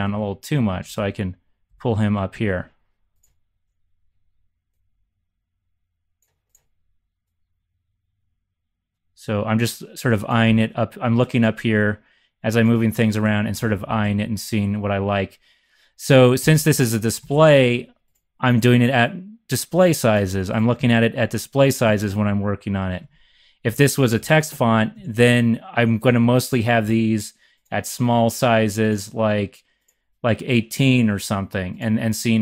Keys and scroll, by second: 0.1 Up, 0.2 Up, 0.8 Up, 0.9 Up, 1.6 Down, 13.5 Down, 13.6 Down, 13.7 Down, 13.8 Down, 14.0 Left, 16.3 Up, 17.1 Down, 18.5 scroll down 1, 20.7 x, 21.8 x, 22.9 z, 23.6 x, 24.6 z, 24.9 z.